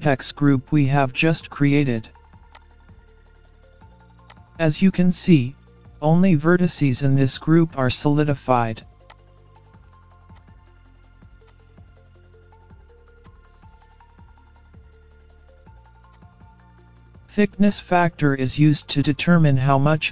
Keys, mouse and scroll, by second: 0.7-1.1 scroll down 2, 2.6 click, 5.6 KP_3, 8.0 click, 9.2 click, 10.9-11.4 scroll down 1, 11.4 click, 11.6-12.0 scroll up 1, 12.9 z, 13.6 middle click, 13.9 scroll down 5, 14.0 scroll up 4, 14.2 middle click, 15.2 KP_3, 15.6 z, 16.3-16.6 scroll down 5, 16.5-16.8 scroll up 5, 17.7 click.